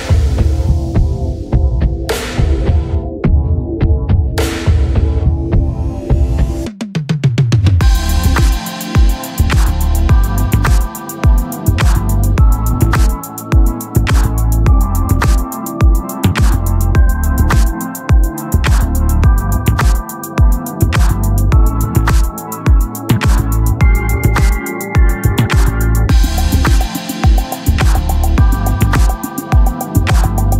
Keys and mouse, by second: 0.5 click, 5.2 click, 6.7 click, 12.1 click, 14.0 click, 22.3 click, 24.6 [, 25.0 [, 25.2 [, 30.2 click.